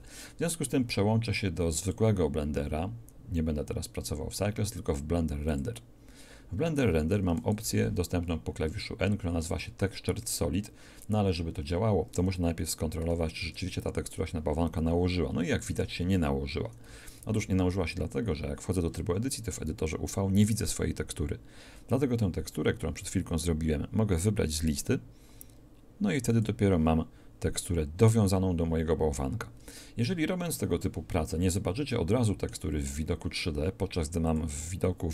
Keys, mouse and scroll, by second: 7.6 n, 12.9 n, 13.3 Tab, 16.9 a, 17.1 a, 24.5-26.3 drag, 31.4-33.2 middle drag, 34.2-35.1 drag.